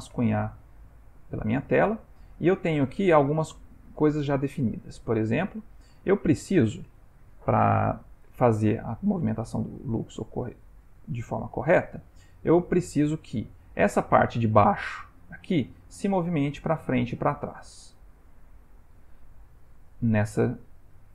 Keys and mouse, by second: 0.8 ctrl+z, 2.0 click, 7.5 shift+middle click, 9.5 ctrl+middle click, 11.9 click.